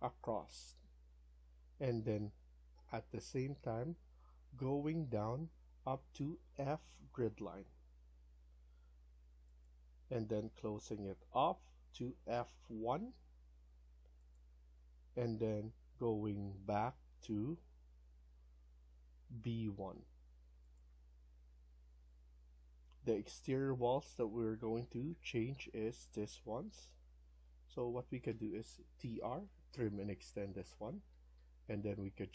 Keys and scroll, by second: 22.0 Escape, 22.3 Escape, 27.3 Escape, 27.7 Escape, 28.7-29.6 typing, 30.9 Escape, 31.3 Escape.